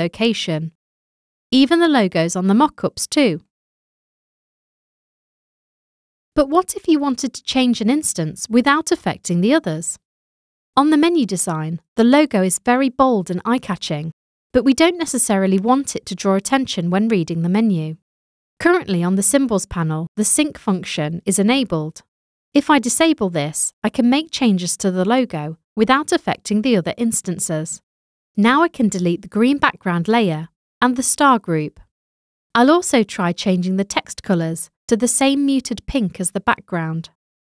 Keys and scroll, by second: 18.0 v, 30.4 Delete.